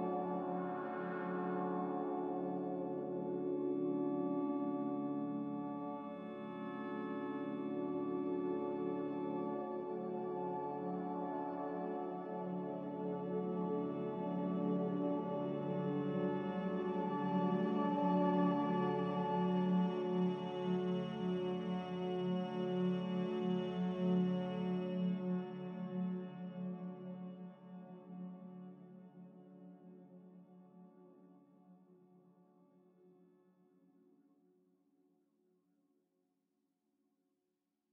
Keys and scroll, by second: 1.1 z, 10.7 a, 14.5 s, 20.0 a, 23.2 x, 26.7 z, 36.8 a, 37.8 n.